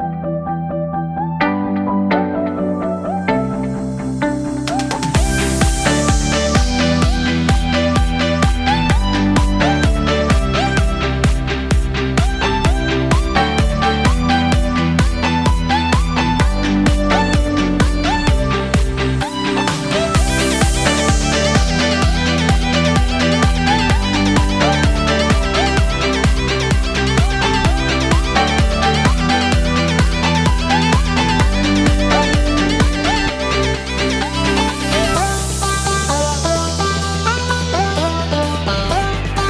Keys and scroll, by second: 2.2 ctrl+j, 16.4 ctrl+j.